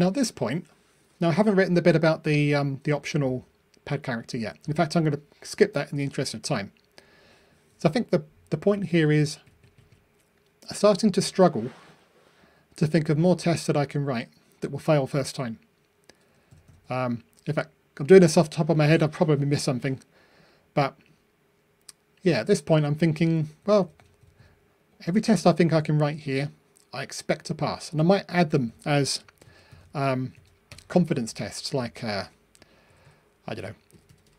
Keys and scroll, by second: 29.2 super+c, 30.0 super+v.